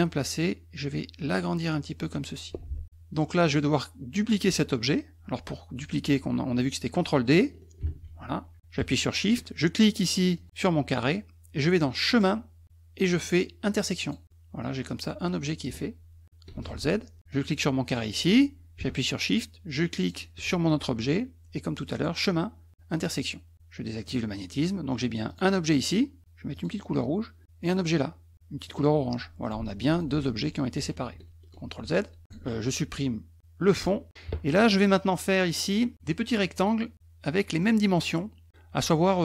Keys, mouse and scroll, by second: 0.9-2.1 drag, 7.8 ctrl+d, 10.3 shift+click, 12.1 click, 14.0 click, 14.6 click, 16.5 ctrl+z, 17.3 click, 20.0 shift+click, 21.9 click, 23.0 click, 24.1 click, 25.3 click, 26.5 click, 27.6 click, 28.7 click, 29.4 click, 29.8 click, 30.3 click, 31.1 ctrl+z, 32.2 shift+click, 33.7 click, 36.2 middle click, 36.9 middle click, 37.6 middle click.